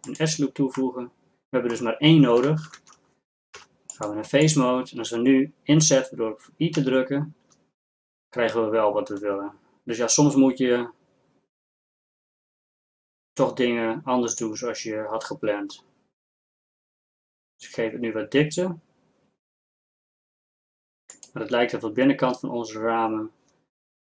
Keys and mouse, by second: 2.8 ctrl+Tab, 6.8 i.